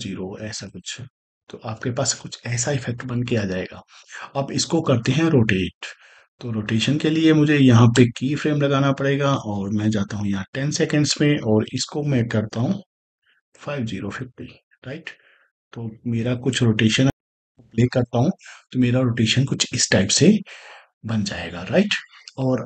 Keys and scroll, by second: 13.3 0, 17.0 space.